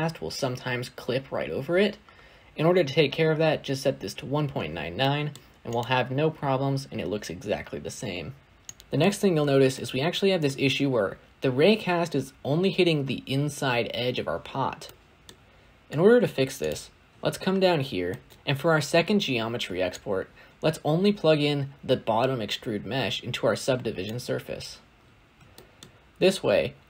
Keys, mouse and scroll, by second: 1.6-2.1 scroll up 1, 2.1-4.2 scroll up 1, 4.2-8.8 scroll up 1, 8.8 shift+middle click, 8.9-9.5 scroll up 2, 9.5 scroll up 1, 9.6-18.3 shift+middle drag, 18.3 click, 24.8-25.4 scroll down 2, 25.4-25.8 shift+middle drag, 25.8-26.8 scroll up 2.